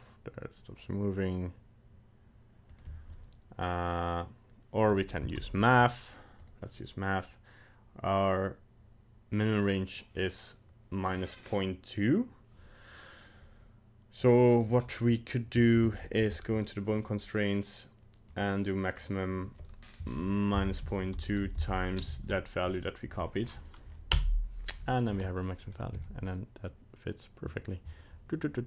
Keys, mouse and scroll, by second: 4.9 right click, 5.3 ctrl+Tab, 5.4 right click, 6.4 click, 14.6 right click, 15.1 right click, 15.8 ctrl+Tab, 16.0 right click, 16.9 click, 18.4 click, 18.9 click, 25.7 right click, 25.9 g.